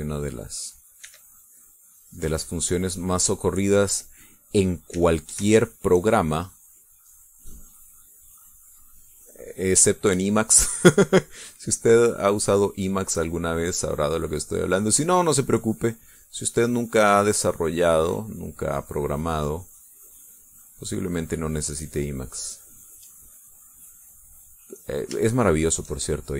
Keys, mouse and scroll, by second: 0.4-1.8 drag, 2.0 e, 2.1-5.2 drag, 5.9 e, 6.4 shift+click, 7.1-8.2 shift+drag, 8.5 click, 9.5 click, 10.8 shift+click, 12.2-13.7 drag, 13.9-15.0 drag, 15.2 click, 16.2 click, 17.3-19.4 drag, 19.5 click, 20.6-23.9 drag, 24.1-25.2 drag, 26.2 shift+middle click.